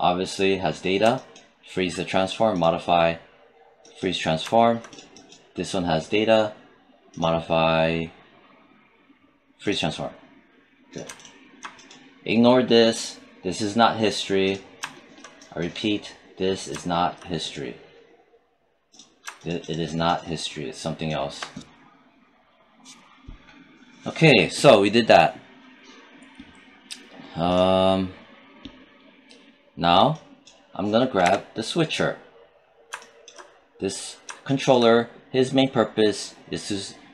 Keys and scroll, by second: 31.1 w.